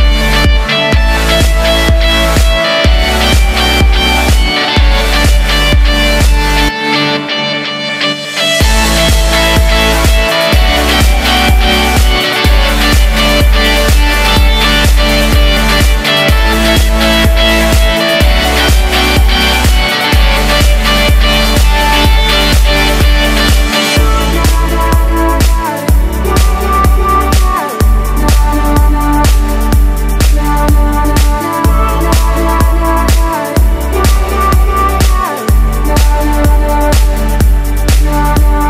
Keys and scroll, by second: 26.7 super+z, 35.4 super+-, 35.8 super+=, 38.0 super+-.